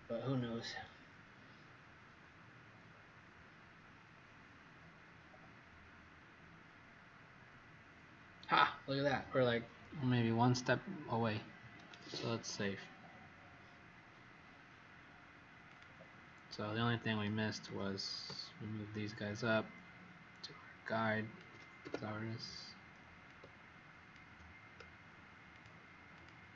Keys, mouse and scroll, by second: 3.1 click, 11.9 ctrl+s, 15.6 click, 18.2 alt+shift+click, 21.8 w, 23.2 click, 26.1 click.